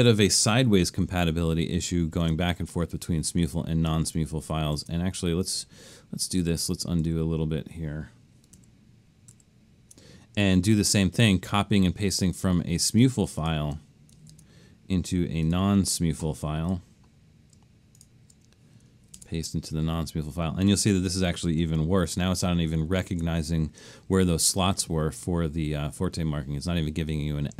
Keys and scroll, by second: 1.1 super+-, 1.6 super+-, 2.2 super+-, 4.1 super+x, 4.8 super+x, 5.9 Escape, 6.5 super+x, 7.1 super+x, 8.6 super+z, 9.4 super+z, 14.3 super+c, 19.2 super+v, 22.1 super+=, 22.8 super+=.